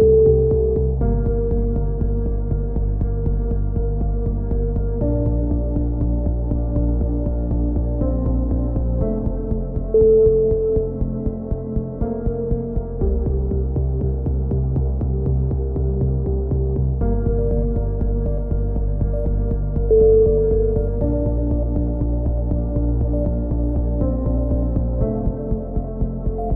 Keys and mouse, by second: 1.4-2.5 middle drag, 2.5-3.5 drag, 2.5 right click, 3.8-5.4 middle drag, 4.1 a, 5.6 ctrl+r, 6.9 a, 8.0-9.1 drag, 8.8-10.5 right drag, 11.8 s, 13.3-14.7 right drag, 14.3 s, 14.7-17.0 middle drag, 17.8 a, 18.5 right click, 19.5 middle click, 19.5 right click, 20.3 middle click, 20.7 e, 21.6 right click, 23.4 a, 24.5 c.